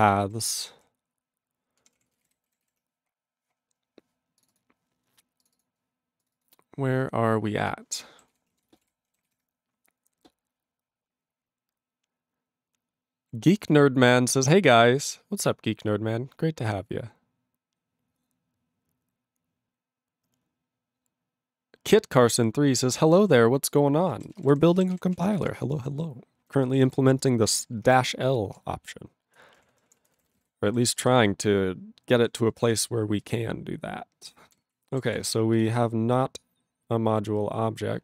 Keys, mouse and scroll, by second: 0.6 ctrl+o, 0.8 ctrl+n, 1.8 ctrl+p, 2.0 ctrl+p, 2.1 ctrl+space, 2.2 ctrl+e, 2.2 ctrl+g, 2.8 ctrl+s, 3.3-4.3 scroll down 5, 4.3 scroll down 1, 4.4 click, 4.4 click, 4.5 click, 4.6 click, 5.4 click, 5.5 click, 5.6 click, 5.6 click, 6.2 click, 6.3 click, 6.3 click, 6.4 double click, 7.6 click, 7.7 click, 8.3 ctrl+s, 8.5 ctrl+a, 8.7 ctrl+space, 8.7 ctrl+e, 8.8 ctrl+g, 9.3 ctrl+s, 24.2 ctrl+a, 24.3 ctrl+space, 24.3 ctrl+e, 24.4 ctrl+g, 24.5 ctrl+n, 24.9 ctrl+s, 25.1 ctrl+space, 25.2 ctrl+p, 25.3 ctrl+g, 25.4 ctrl+e, 25.5 ctrl+n, 25.6-26.5 ctrl+n, 26.9 ctrl+s, 28.6 ctrl+s, 29.7 ctrl+p, 29.7 ctrl+p, 29.9 ctrl+space, 30.0 ctrl+e, 30.3 ctrl+n, 30.9 ctrl+s, 31.0 ctrl+g, 31.2-32.2 ctrl+p, 32.6 ctrl+p, 33.3 ctrl+n, 34.9 ctrl+e, 35.1 ctrl+s, 35.7 click, 35.7 click, 35.7 double click, 36.2-36.8 scroll down 2, 37.8-38.0 scroll.